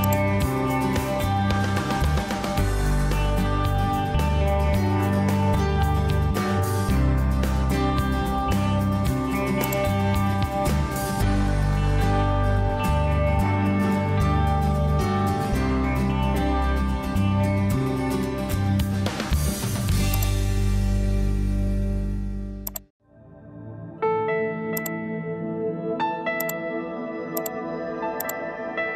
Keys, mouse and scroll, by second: 16.7 Escape, 23.9 Escape.